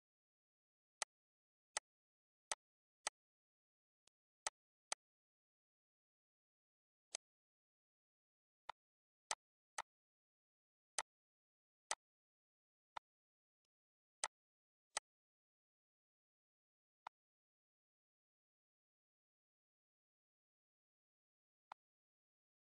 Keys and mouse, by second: 0.1 click, 1.3 click, 2.0 click, 2.7 click, 4.3 click, 5.9 click, 7.4 click, 8.9 click, 9.5 click, 10.0 shift+click, 11.1 shift+click, 12.0 click, 13.0 click, 13.7 click, 14.2 click, 14.9 click, 17.0 click, 21.5 click, 22.2 ctrl+d, 22.4 click.